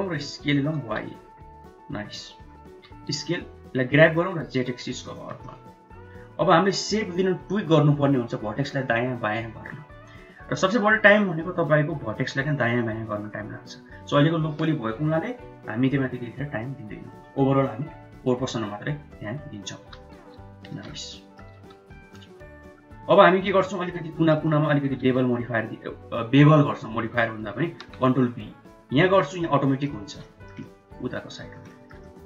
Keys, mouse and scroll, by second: 0.4 s, 2.7 g, 5.8 shift+middle click, 19.8 g, 21.1 middle click, 21.5 Tab, 21.9 middle click, 23.1 middle click, 23.7 shift+z, 23.9 shift+middle click, 24.5 click, 25.0 2, 25.5 click, 27.8 ctrl+b, 29.2 middle click, 29.8 middle click, 30.3 shift+middle click, 30.9 middle click, 31.7 shift+middle click, 32.1 middle click.